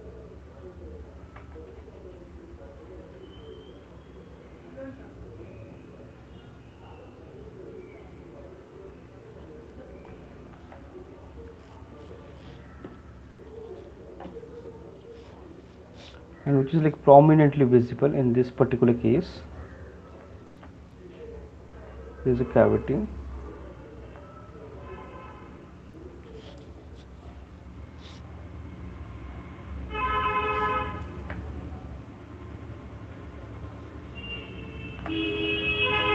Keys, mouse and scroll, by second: 1.0 middle click, 1.0 click, 2.0 ctrl+z, 2.4 click, 2.8 click, 3.4 click, 4.5 click, 4.9 click, 5.5 click, 5.9 click, 6.8 click, 6.9 click, 7.5 click, 7.9 click, 8.6 click, 8.9 click, 9.3 click, 9.9 click, 11.0-11.4 alt+click, 11.4 click, 13.8 click, 17.5 click, 18.3 click, 19.0 click, 19.4 click, 20.5 alt+click, 22.0 click, 23.4 alt+click, 24.0 alt+click, 26.5 click, 29.5 click, 29.9 click, 30.3 click, 31.5-32.0 alt+click, 32.0 click, 32.5 click, 33.3 click, 36.0 click.